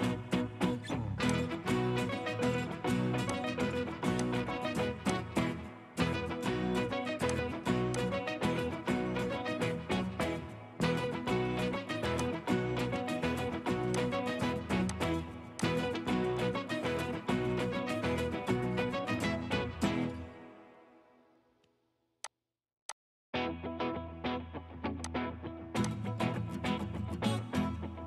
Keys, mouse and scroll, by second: 6.4 right click, 8.3-8.9 scroll up 1, 8.9 middle click, 10.2-10.8 scroll up 1, 10.8 scroll down 1, 16.3 scroll down 1, 16.8 middle click, 17.2-17.6 scroll up 1, 17.6 scroll down 1, 18.0 scroll up 1, 18.2 scroll down 1, 18.7 middle click, 19.3-20.0 scroll up 1.